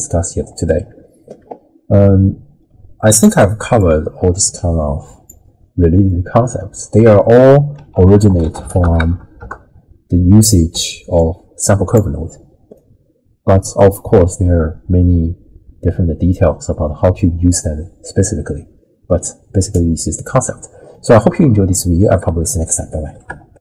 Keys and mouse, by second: 2.0-3.3 drag, 3.8-5.3 drag, 6.1 middle click, 7.8 ctrl+a, 10.7-12.6 d, 11.2 click, 12.8 click, 12.8 d, 13.6 d, 13.7 d, 20.9 middle click, 21.0 click, 22.2 click.